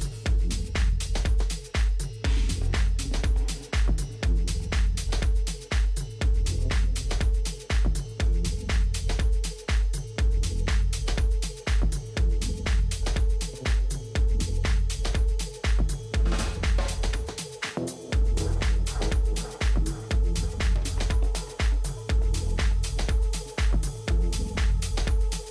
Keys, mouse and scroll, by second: 1.9 s, 5.3-7.0 middle drag, 10.4-12.9 middle drag, 15.4 s, 20.2 a, 20.8-22.6 middle drag, 23.3 right click, 24.0 click.